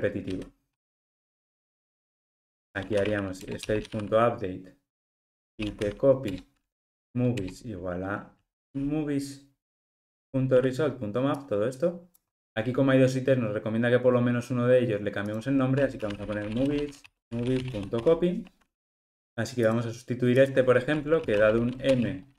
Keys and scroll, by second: 3.4 Return, 10.3 Escape, 17.2 alt+shift+Left.